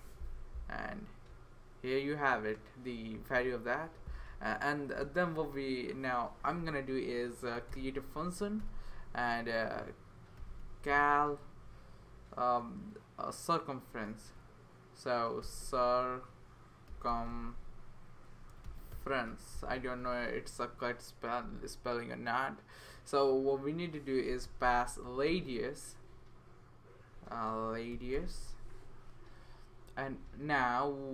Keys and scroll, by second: 0.0-0.1 typing, 7.3-8.2 typing, 8.6 Return, 10.1-11.4 typing, 14.2-20.5 typing, 21.5 Right, 24.0-25.8 typing, 27.1-28.9 typing, 29.9 Right, 30.1 Right, 30.2 Right, 30.6 Right.